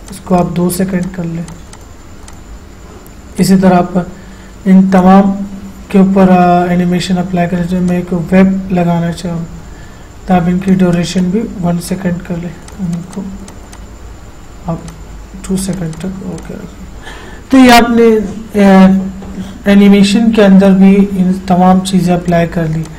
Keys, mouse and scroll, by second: 8.2 click, 11.0 click, 19.1 click, 19.2 click, 22.6 click, 22.6 typing.